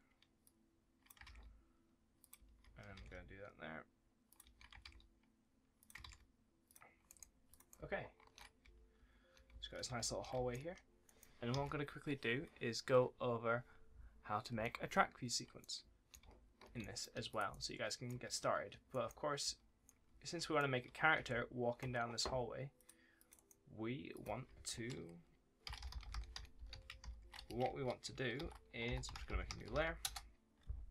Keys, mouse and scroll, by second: 0.3 click, 1.1 ctrl+d, 2.1 click, 2.2 s, 2.8 ctrl+d, 3.0 a, 4.2 click, 4.3 a, 4.7 ctrl+d, 5.7 click, 5.9 ctrl+d, 6.5 click, 6.9 right click, 7.4 click, 7.6 right click, 7.6 a, 8.5 d, 8.8 w, 9.8 d, 10.9 right click, 11.4 ctrl+s, 15.5 right click, 15.7 w, 16.7 right click, 17.2 click, 17.3 s, 18.8 right click, 18.9 w, 19.5 s, 19.7 right click, 20.0 d, 22.6 click, 23.2 right click, 24.0 click, 25.5 shift+c, 26.9 shift+0, 27.2 BackSpace, 28.7-29.9 typing, 29.9 Return.